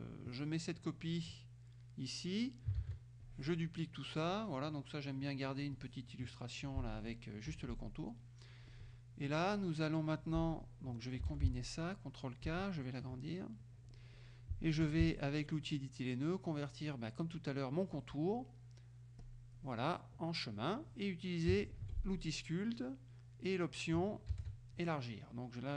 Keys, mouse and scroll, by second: 0.2-1.5 drag, 2.8 ctrl+d, 3.3 ctrl+click, 5.8 click, 7.0 F2, 7.5 F1, 8.0 middle click, 8.8 click, 9.4 click, 11.4 ctrl+k, 12.5 ctrl+click, 13.7 click, 14.9 F2, 19.3 click, 21.9 shift+F2, 24.4 shift+s.